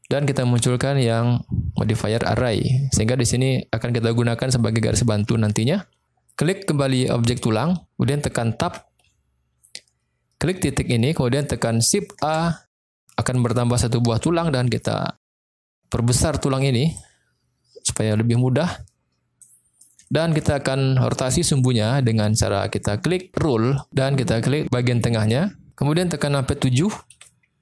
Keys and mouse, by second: 2.4 click, 5.0-5.4 middle drag, 7.3 click, 8.6 Tab, 10.9 click, 12.2 shift+a, 15.1 click, 15.7 middle click, 17.0-19.3 drag, 20.0 shift+middle click, 23.6 click, 24.9 click, 27.1 KP_7.